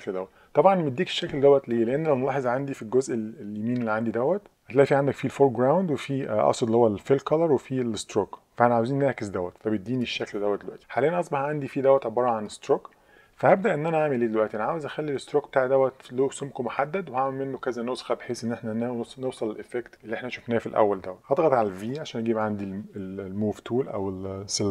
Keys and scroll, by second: 21.9 v.